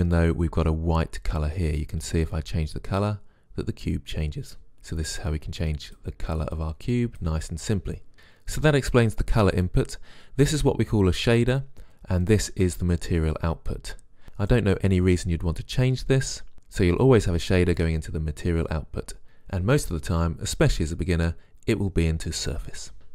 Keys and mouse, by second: 1.9-3.3 drag.